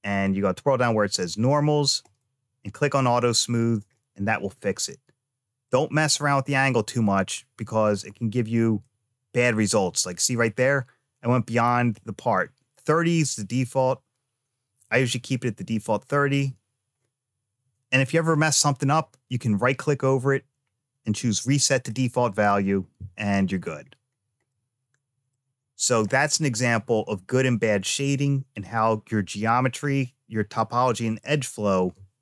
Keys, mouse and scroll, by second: 0.0 click, 0.5-0.9 scroll down 2, 1.9 click, 3.6 click, 5.5-16.0 drag, 19.4-22.4 right drag, 23.1 click, 23.5-24.3 scroll down 3, 24.3 middle click, 29.7-30.1 scroll up 1, 30.4 shift+middle click.